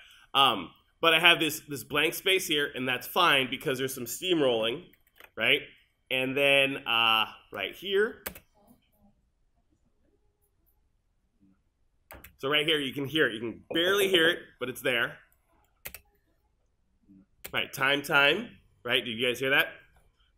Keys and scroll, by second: 8.3 space, 12.2 space, 15.9 space.